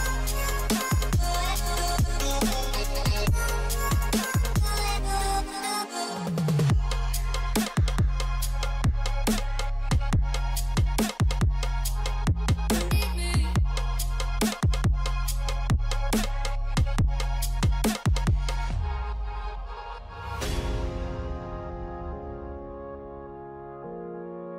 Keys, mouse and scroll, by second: 1.2-1.9 typing, 5.6-6.3 typing, 8.7 double click, 16.0 double click, 17.7-18.6 typing, 18.6 double click, 20.5 double click.